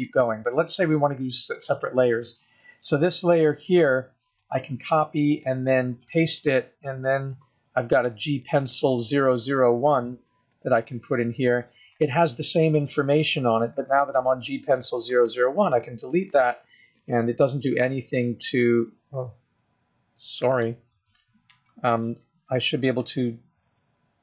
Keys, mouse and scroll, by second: 1.9 click, 3.1 right click, 5.5 right click, 7.0-8.3 scroll down 2, 8.3 click, 8.3 scroll down 1, 15.3 x, 19.5-20.1 scroll up 1, 20.1-21.3 scroll down 1, 21.8 ctrl+z, 23.1 click.